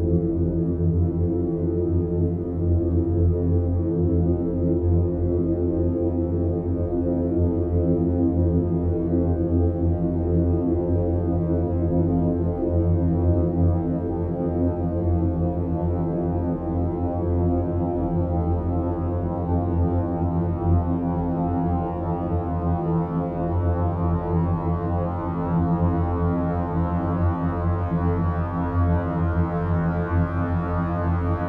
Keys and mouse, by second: 0.5 g, 3.7 g, 6.4 g, 9.3 3, 10.2 alt+shift+click, 10.8 e, 12.0 s, 15.0 Tab, 19.1 s, 21.0 Tab, 21.7 Tab, 23.2 click, 24.1-25.2 drag, 26.6 click, 27.8-31.4 drag, 28.7 KP_0.